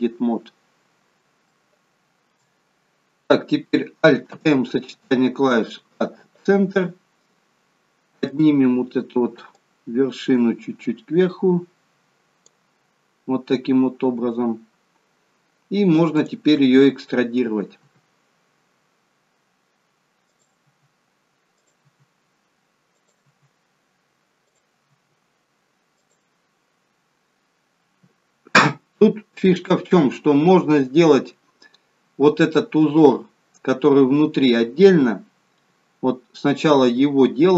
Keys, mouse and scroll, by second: 1.4 shift+middle click, 4.2 alt+m, 8.2 click, 9.5 click, 12.9-15.0 scroll up 5, 17.0 click, 17.7 e, 20.6 e, 21.8 e, 23.2 e, 24.8 e, 34.5-36.7 scroll down 2, 36.7 e.